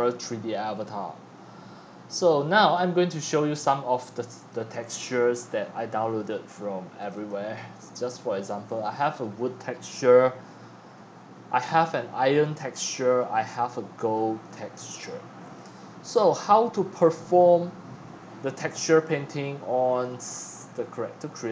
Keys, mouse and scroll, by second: 2.7 click, 3.1 click, 4.2 click, 4.4 click, 6.1 click, 6.6 click, 9.9 Left, 10.0 Right, 10.9 Left, 12.5 Left, 13.7-14.4 scroll down 13, 15.6-17.3 drag, 19.9-21.5 drag.